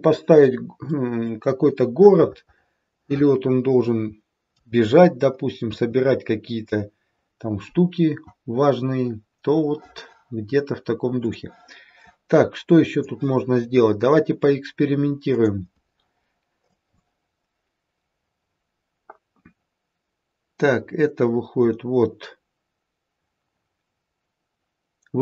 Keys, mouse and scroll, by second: 0.9 middle click, 1.9 middle click, 5.6 KP_3, 7.5-8.6 scroll up 2, 8.6-10.6 scroll up 1, 11.2 click, 12.8 click, 15.3 click, 16.7 click.